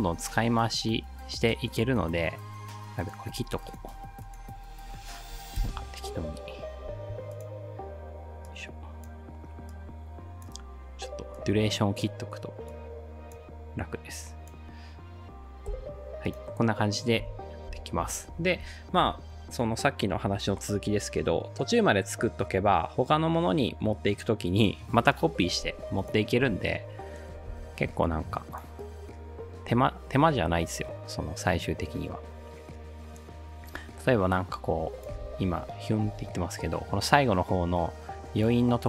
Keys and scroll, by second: 5.6 alt+], 6.9 u, 15.7 l, 17.2-17.7 typing, 26.4 space, 27.5 space, 35.2 space, 36.1 space.